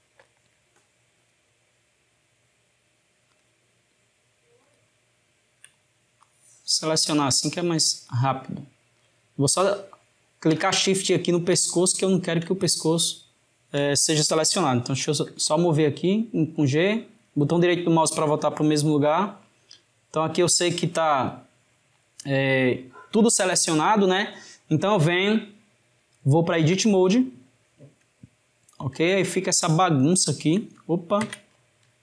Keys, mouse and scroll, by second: 0.3 shift+click, 1.3 shift+click, 3.4 shift+click, 4.6 shift+click, 6.2 drag, 10.6 shift+click, 11.6 shift+click, 12.8-15.1 shift+middle drag, 15.1 g, 22.7-25.8 shift+middle drag, 26.7 Tab, 28.2-31.3 ctrl+middle drag, 31.3 Tab.